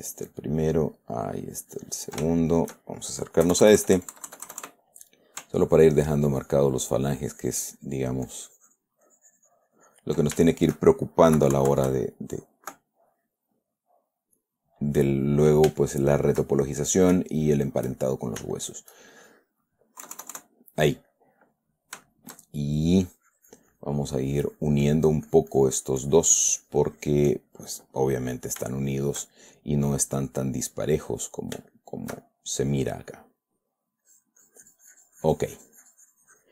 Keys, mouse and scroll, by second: 1.3-2.6 ctrl+drag, 2.7 ctrl+shift+middle click, 3.9 KP_Add, 5.6-7.2 ctrl+drag, 7.4-8.5 ctrl+drag, 8.7 ctrl+click, 9.5 ctrl+click, 9.6 ctrl+middle click, 10.9 ctrl+shift+middle click, 11.7 shift+KP_Subtract, 14.7 click, 15.7 click, 16.2 shift+click, 17.0 shift+click, 17.9-18.9 shift+drag, 20.4 KP_Add, 21.5 middle click, 22.5 shift+middle click, 23.4-28.1 shift+drag, 28.3 middle click, 29.0 shift+click, 29.7 shift+click, 31.3 click, 33.5 click, 34.4-36.5 drag.